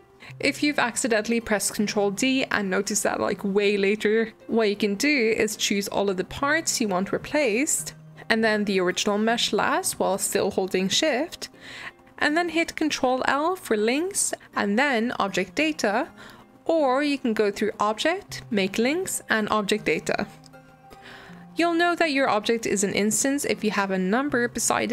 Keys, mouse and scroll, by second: 0.0 shift+d, 1.5 shift+d, 2.8-4.3 middle drag, 5.1 shift+click, 6.1 shift+click, 8.0 shift+click, 12.7 ctrl+l, 17.5-19.6 drag, 21.1 click, 22.5 click, 23.7 click.